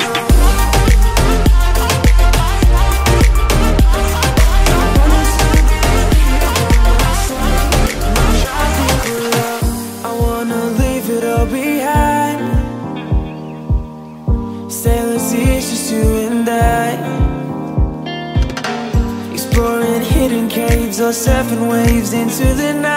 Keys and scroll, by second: 0.5-1.5 typing, 4.8 ctrl+c, 5.3 Tab, 5.4 space, 6.0 ctrl+v, 6.5 ctrl+a.